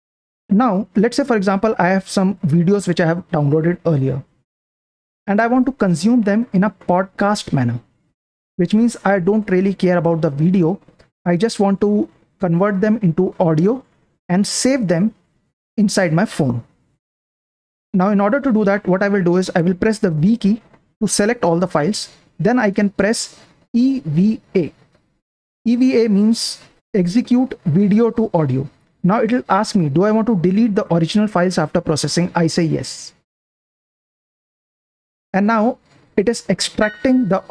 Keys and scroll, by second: 1.4-1.9 typing, 1.9 Down, 2.5 Right, 3.6 Down, 3.6 typing, 4.4 Down, 5.1 Down, 6.3 Down, 9.0-9.8 typing, 10.2 Up, 17.4 super+Print, 23.4-25.0 typing, 32.6 Down, 33.3 Return.